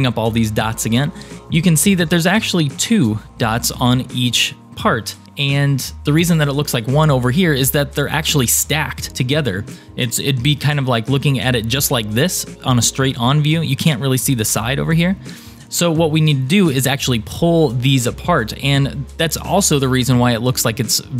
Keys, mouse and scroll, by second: 11.2 KP_3, 14.0-15.4 middle drag.